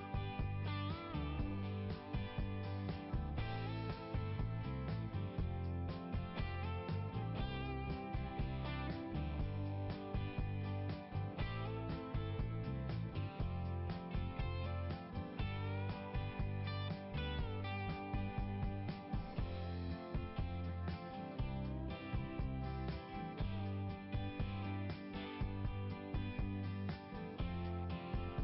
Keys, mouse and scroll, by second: 2.8 click, 3.2 click, 9.0 click, 10.5 click, 11.2 click, 12.6 click, 21.2 click, 22.2-23.3 scroll up 1, 25.7 click, 26.3 scroll down 1.